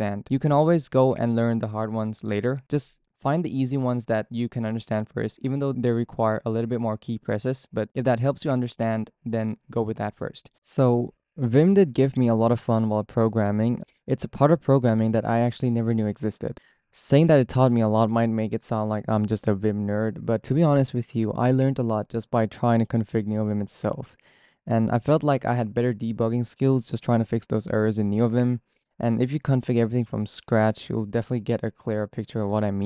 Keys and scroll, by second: 6.3 shift+v, 6.7 y, 7.4 p, 8.2 j, 9.8 j, 12.9 j.